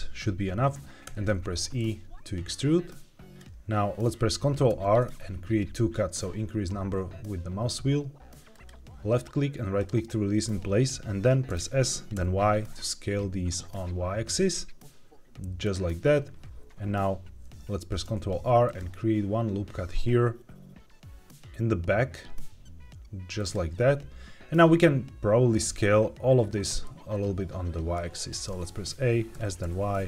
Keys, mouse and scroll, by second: 1.0 e, 3.3 click, 4.6 ctrl+r, 9.7 right click, 11.4 s, 12.1 y, 15.5-18.0 drag, 18.0 ctrl+r, 23.3 click, 26.8-27.9 middle drag, 28.4 a, 29.2 s, 29.5 y.